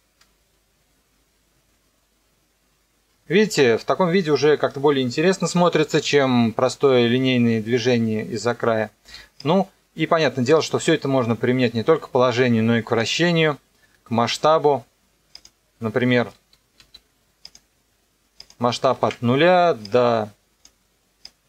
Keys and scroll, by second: 0.2 KP_0, 9.0 space, 16.8 s, 18.9 KP_0, 19.0 KP_Enter.